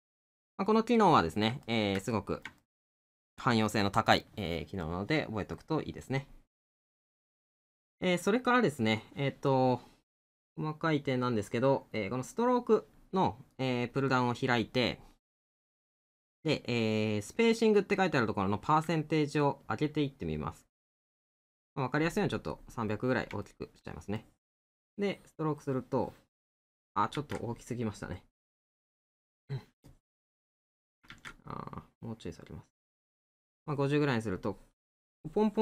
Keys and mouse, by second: 1.0 middle click, 8.1 middle click, 12.0 middle click, 22.9 middle click.